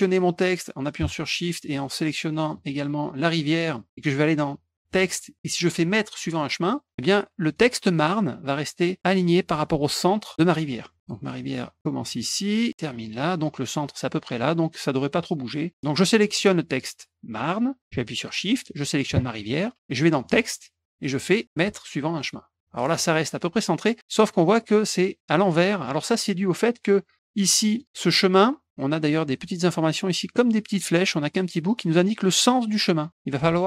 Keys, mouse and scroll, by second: 1.6 shift+click, 6.6 click, 7.4 click, 10.5 middle click, 12.0 click, 13.1 click, 16.4 click, 18.7 shift+click, 20.2 click, 22.2 click, 24.4 middle click, 24.4 scroll up 1, 26.6 click, 27.7 click.